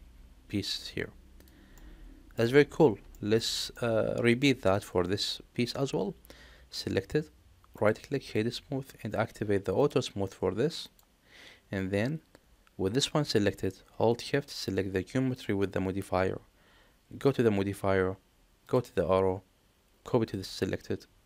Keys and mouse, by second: 1.6-2.3 middle drag, 3.0 shift+middle click, 3.6-4.3 middle drag, 4.6 click, 7.6-8.3 right drag, 9.6 click, 10.7 click, 15.2 shift+click, 18.6-20.3 drag.